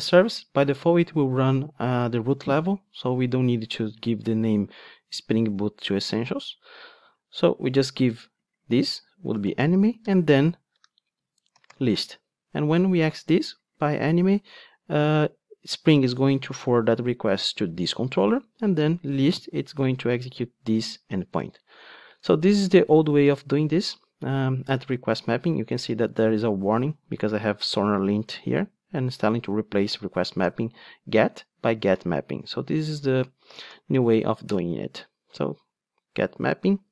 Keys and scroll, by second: 34.6 Return.